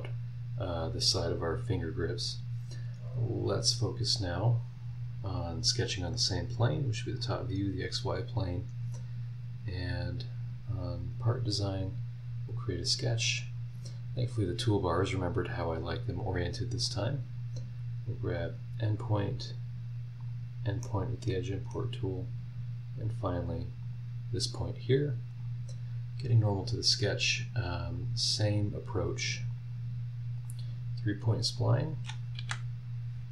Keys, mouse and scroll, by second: 7.2 click, 12.5 click, 12.7-15.2 middle drag, 15.2 scroll up 1, 16.8 click, 18.4 click, 20.2 click, 20.8-21.9 middle drag, 21.3 right click, 22.0 scroll down 1, 22.5 scroll up 2, 23.8 click, 25.3 click, 27.9 click, 29.5 click, 30.4 click, 31.5 click, 32.3 Escape.